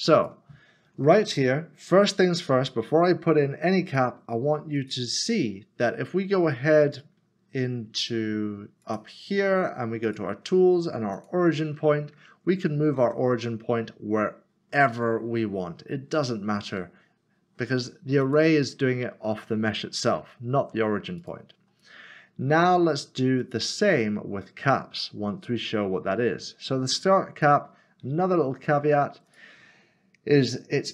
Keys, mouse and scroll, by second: 0.3 click, 3.9 click, 8.8 click, 13.0 l, 15.3 typing, 18.2 click, 20.3 ctrl+z, 21.2 ctrl+z, 23.4 click, 27.4 click.